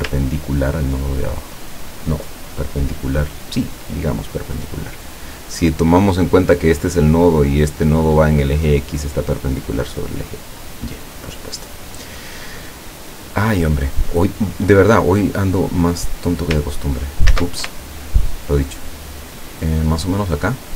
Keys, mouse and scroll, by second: 0.2-3.8 ctrl+drag, 15.8-17.4 drag, 17.4 ctrl+z, 17.8-20.7 ctrl+drag.